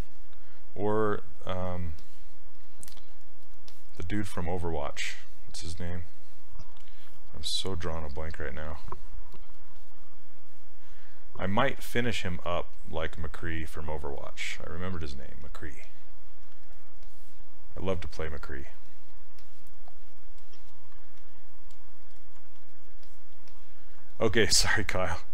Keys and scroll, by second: 8.1-8.8 typing.